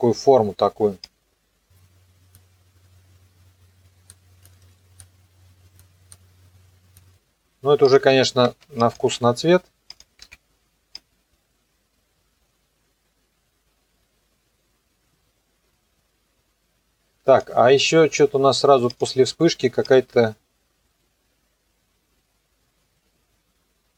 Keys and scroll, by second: 4.6 ctrl+z, 8.4 ctrl+c, 9.1 ctrl+v.